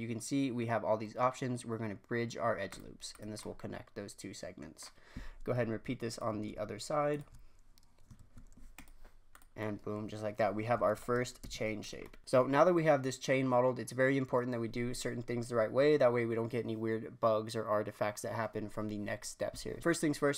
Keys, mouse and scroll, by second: 3.1 click, 3.4-6.1 middle drag, 6.1 alt+click, 7.1 alt+shift+click, 8.1 e, 9.3 click, 9.5-10.6 middle drag, 10.6 scroll down 1, 10.8 shift+middle click, 11.4 Tab, 11.5 scroll down 1, 11.8-12.2 drag.